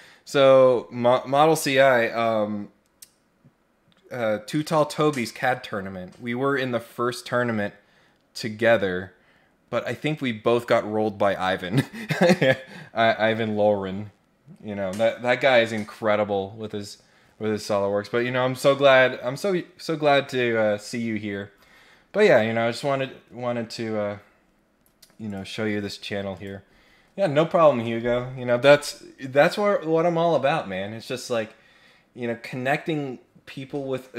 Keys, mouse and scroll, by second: 25.2 click, 26.3 click.